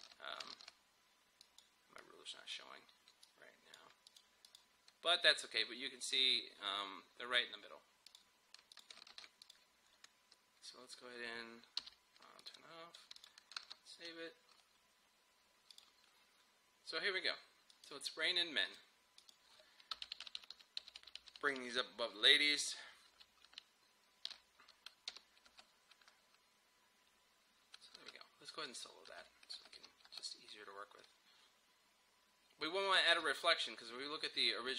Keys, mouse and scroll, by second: 0.6 ctrl+r, 1.4-4.1 drag, 8.1 click, 9.1 ctrl+r, 9.5 click, 12.4 click, 13.2 ctrl+click, 13.7 ctrl+s, 15.8 click, 20.1 shift+Up, 25.1 Home, 25.5 space, 28.0 space, 28.7 click, 29.1 space, 29.8 Home, 30.1 space, 33.0 space.